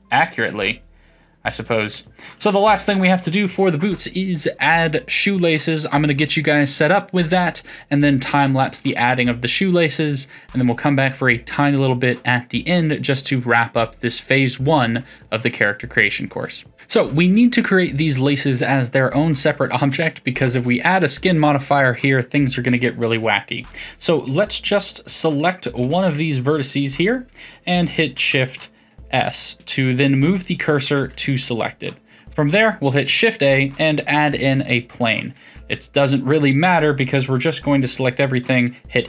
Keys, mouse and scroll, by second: 1.3-2.0 scroll down 2, 2.0-5.0 shift+middle drag, 16.7 click, 23.6 click, 25.3 click, 26.0 1, 26.6 click, 27.0-28.0 middle drag, 28.0 shift+s, 30.9 Tab, 31.4 middle click, 33.0 shift+a, 35.5 Tab, 38.0 m.